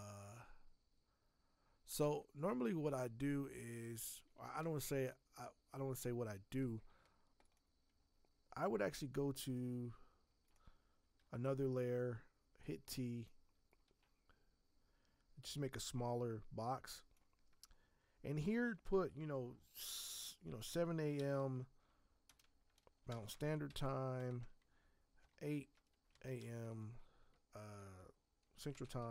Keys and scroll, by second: 11.1 t, 13.8 Escape, 20.4-24.1 typing, 26.0-26.8 typing, 28.5-29.1 typing.